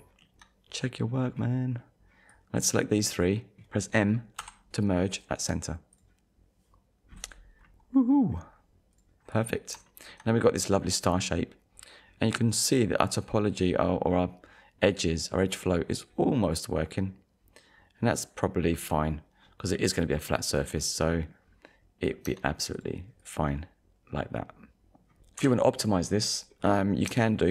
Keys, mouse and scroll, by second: 1.7 scroll up 1, 2.3 click, 4.4 m, 5.9 click, 7.1-7.5 scroll down 1, 7.6-8.1 scroll down 1, 8.5 scroll up 1, 9.2-9.6 scroll down 1, 9.9 shift+middle click, 11.0 scroll down 1, 12.0 scroll up 1, 18.6 scroll down 1, 19.7 middle click, 21.4-21.8 scroll down 1, 22.3 Tab, 22.8 click, 23.5 middle click, 25.5 KP_1, 26.7 scroll up 1, 27.4 shift+middle click.